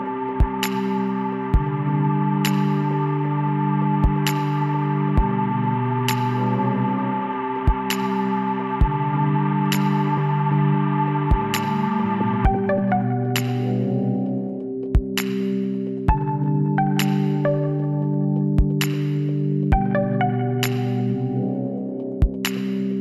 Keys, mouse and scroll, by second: 0.3-2.1 drag, 1.1-2.1 right drag, 2.1 KP_1, 3.7 middle click, 5.2-7.4 middle drag, 6.1 e, 8.7 s, 11.3-13.4 middle drag, 13.4 KP_3, 14.0-16.6 middle drag, 16.7-19.5 middle drag, 17.9 e, 20.4 middle click, 22.0 s.